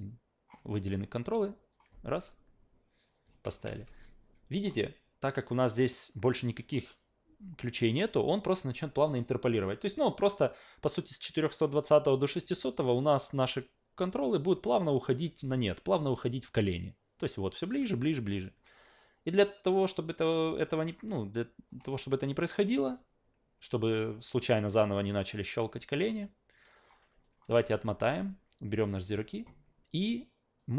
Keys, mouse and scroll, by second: 1.7 click, 3.6 alt+middle click, 3.7 a, 9.2-11.4 drag, 11.8-13.4 drag, 14.8-22.8 drag, 24.3-26.8 drag, 27.2 alt+middle click, 27.6 ctrl+z, 28.0 ctrl+z, 30.6-30.7 drag.